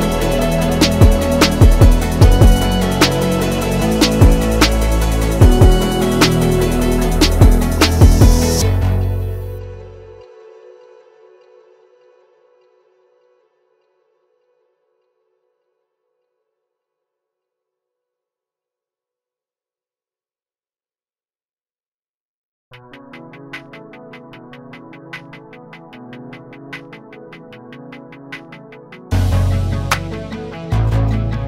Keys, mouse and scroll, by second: 1.4-6.5 drag, 9.1 click, 12.0 click, 14.5 click, 17.1 click, 18.5-19.8 typing, 19.8 Return, 21.9 click, 23.8-25.7 drag, 26.5-27.0 typing, 27.5 Return, 30.3 click.